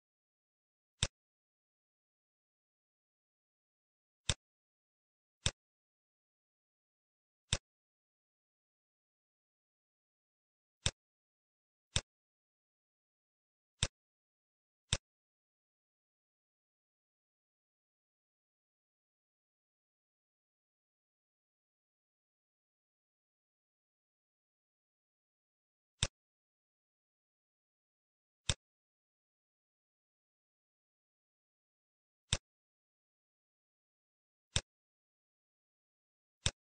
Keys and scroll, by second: 0.0 9, 2.1 9, 8.2 Right, 8.6 Right, 16.9 1, 17.5 1, 19.7 Left, 21.1 (, 21.8 Right, 23.7 ).